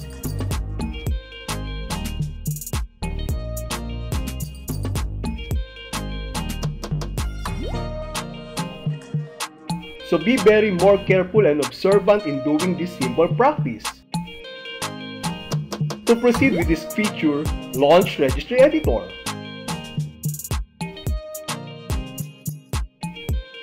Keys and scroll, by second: 3.2 Return, 19.4 shift+f, 21.2 s.